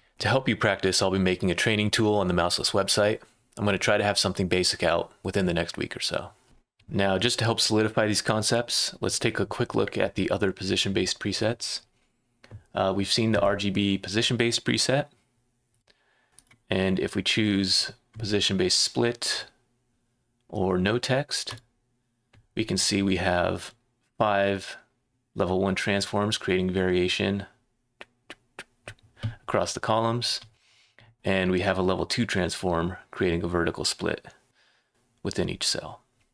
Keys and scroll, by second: 6.4 Left, 6.4 Right, 6.4 ⟲.